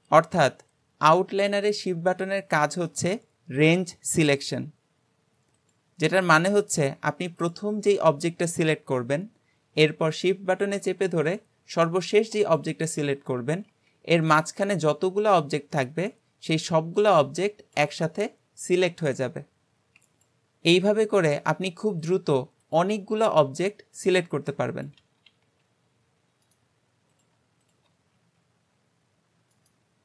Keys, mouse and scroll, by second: 5.6 click, 6.2 click, 7.4 click, 12.4 shift+click, 20.2 click, 22.0 shift+click, 22.6 click, 23.2 shift+click, 24.0 click, 24.8 shift+click, 25.4 g, 27.1 click, 27.6 shift+click, 28.2 g.